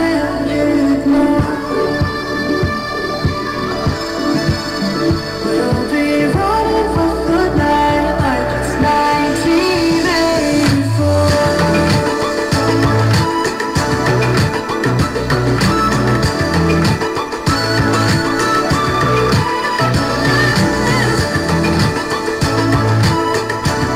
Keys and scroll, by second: 6.3 ctrl+alt+z.